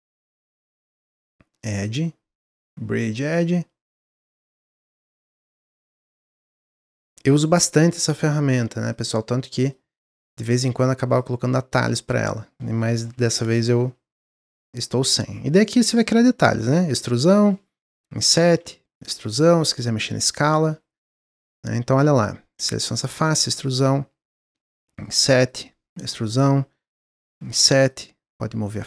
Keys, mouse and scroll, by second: 0.5 shift+click, 1.5-3.9 drag, 4.1 middle click, 5.0 shift+click, 5.8-7.3 drag, 7.5 middle click, 8.1 shift+click, 8.9-10.0 drag, 10.0 middle click, 10.7-11.1 scroll down 1, 11.1 click, 11.4 middle click, 12.0 click, 12.3-12.6 scroll up 3, 13.2 i, 16.8 e, 17.9 i, 18.9 e, 19.6 s, 20.6 middle click, 21.4 click, 28.6-28.8 drag.